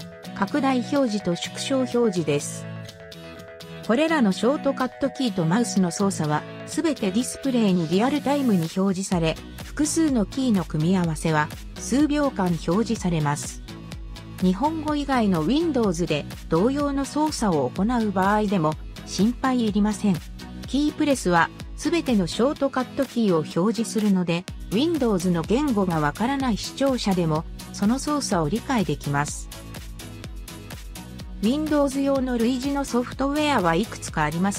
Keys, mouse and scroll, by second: 0.7-1.6 ctrl+scroll up 10, 2.2-4.0 ctrl+scroll down 19, 5.7-6.1 drag, 11.2-20.2 ctrl+drag, 14.3 Delete, 20.2-22.4 ctrl+drag, 23.7-26.3 typing.